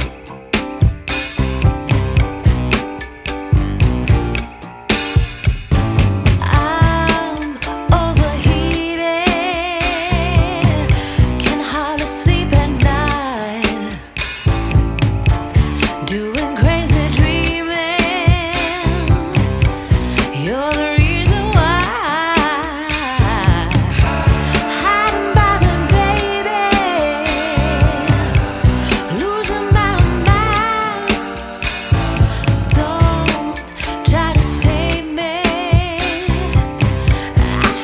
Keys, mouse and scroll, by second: 3.2-5.1 scroll up 1, 5.1-5.9 scroll up 2, 5.9 scroll down 1, 7.0-7.6 scroll up 3, 7.6-8.5 scroll down 4, 12.0 click, 15.2 click, 15.2 F10, 16.6 scroll down 1, 16.6 scroll up 1, 16.7 scroll down 1, 16.8-18.4 scroll up 9, 18.4-19.1 scroll down 1, 19.1 click, 27.4 scroll down 1, 27.5 scroll up 1, 27.6 scroll down 1, 27.7 scroll up 1, 27.8 scroll down 1, 27.8-29.9 scroll up 4, 29.9 scroll down 1, 30.9 click.